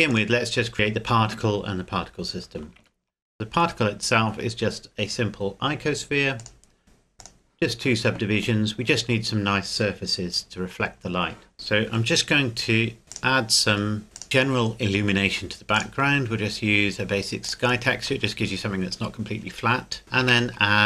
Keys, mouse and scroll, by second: 0.1 click, 2.6 click, 2.8 shift+a, 6.4 click, 11.5-12.8 scroll down 1, 13.1 click, 15.8 click, 20.0 scroll up 1, 20.3 shift+a.